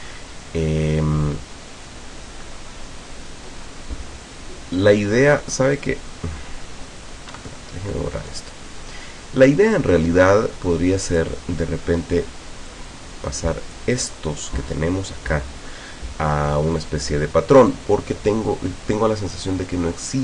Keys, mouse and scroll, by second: 7.4 Delete, 11.1 click, 12.7-14.0 drag, 17.6 click.